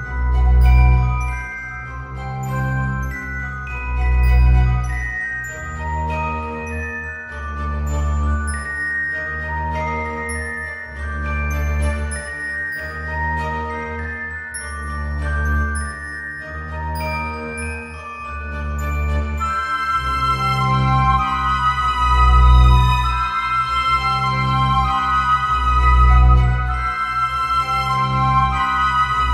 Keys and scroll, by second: 9.2 alt+x.